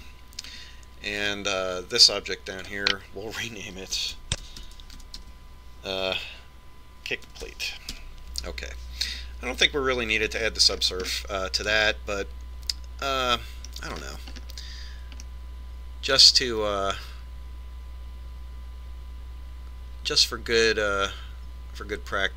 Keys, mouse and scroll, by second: 2.8 right click, 4.3 click, 12.1-15.2 middle drag, 15.6-16.9 scroll up 1, 16.9-18.7 middle drag.